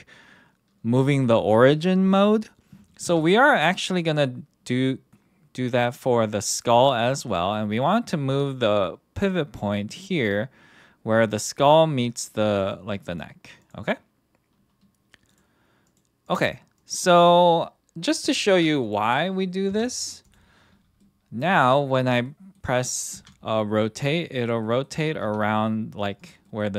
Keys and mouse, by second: 3.0 g, 12.6 click, 13.6 click, 15.3 click, 18.5 ctrl+., 18.8 click, 19.7 KP_1, 20.2 click, 21.0-21.4 middle drag, 21.7 middle drag, 22.2-22.5 middle drag, 23.1 r, 24.6 middle drag, 25.2 r, 26.4 middle click.